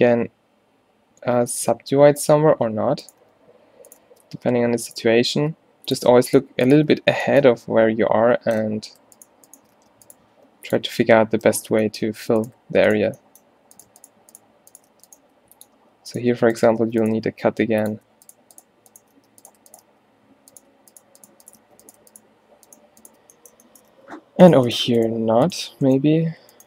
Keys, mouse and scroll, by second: 1.6 alt+w, 2.4 ctrl+z, 3.3 g, 4.1 shift+Tab, 4.3 g, 5.2 shift+Tab, 5.4 g, 7.0 f, 7.7 f, 9.9 f, 10.4 g, 10.9 a, 11.0 a, 11.5 ctrl+n, 12.6 right click, 15.0 f, 15.3 g, 16.9 alt+w, 17.2 g, 19.2 f, 19.9 f, 21.7 f, 24.0 f, 26.4 f.